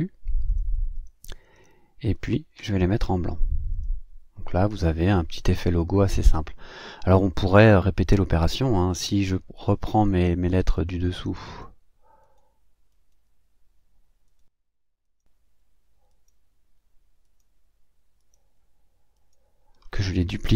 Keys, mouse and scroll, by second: 0.5 shift+click, 0.9 shift+click, 1.5 shift+click, 2.1 shift+click, 3.7 click, 4.5 click, 9.6 click, 10.7 click, 11.4 click, 12.2 click, 15.0 shift+click.